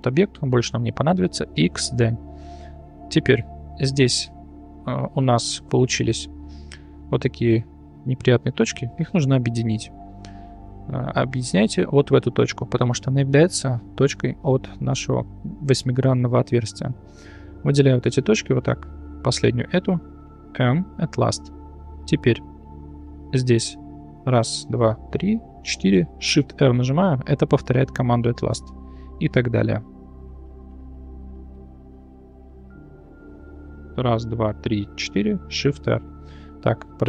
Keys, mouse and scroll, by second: 2.3 middle click, 2.8 click, 3.0-3.3 middle drag, 3.8 shift+middle drag, 4.3 Tab, 5.1 1, 5.7 click, 7.1 click, 7.6 click, 8.9-10.0 middle drag, 11.7 click, 15.9 middle click, 19.1 shift+click, 20.4 m, 22.5 middle click, 23.4 i, 24.0 click, 25.0 shift+click, 25.6 shift+click, 26.4 shift+r, 28.2 middle drag, 29.5 click, 30.5 shift+click, 30.9 shift+click, 31.3 shift+r, 32.9-33.3 shift+middle drag, 34.2 shift+drag, 34.6 shift+click, 35.0 shift+click, 35.4 shift+r, 36.6 middle click.